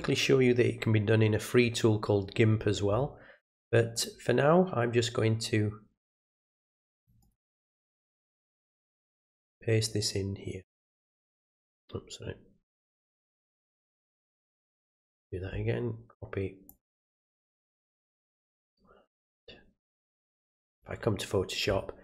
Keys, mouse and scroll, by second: 3.9 click, 6.9 click, 7.2 right click, 8.1 click, 9.0 click, 14.2 click, 16.6 click, 20.7 click.